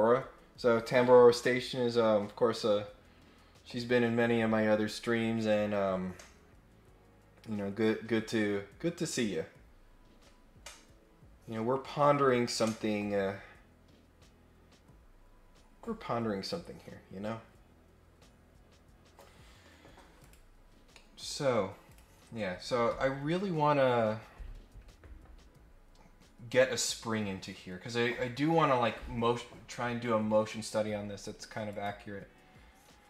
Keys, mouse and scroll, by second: 20.2 click, 20.9 middle click, 21.8 click, 31.7 click.